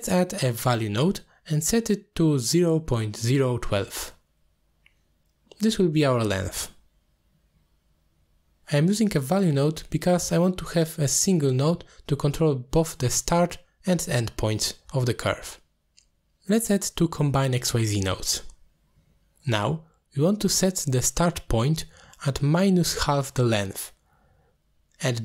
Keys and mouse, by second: 0.0 shift+a, 3.0-4.8 drag, 7.8 click, 14.0 click, 16.3 shift+a, 19.4 shift+d, 20.7 click, 22.4-23.0 drag, 23.3 click, 23.4 click, 23.8 click, 24.1-24.5 drag.